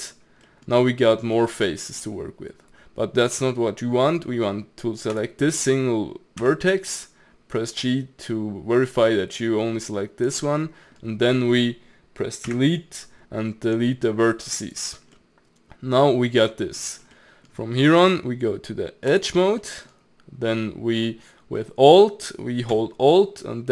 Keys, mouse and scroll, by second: 5.1 click, 5.5 middle click, 6.4 g, 10.6-12.5 middle drag, 12.5 Delete, 15.1-16.9 middle drag, 16.9 scroll up 1, 17.1-19.2 middle drag, 19.2 click, 19.6-22.7 middle drag.